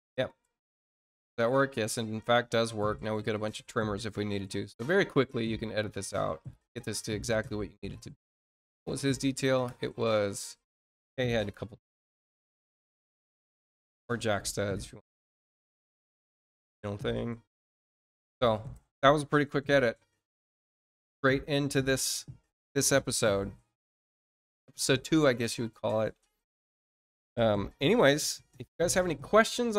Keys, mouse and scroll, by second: 0.5 click, 1.5 scroll down 1, 2.0 middle click, 3.9 scroll down 1, 4.7 scroll up 1, 6.4 middle click, 14.2 click, 15.6 click, 16.2-17.7 drag.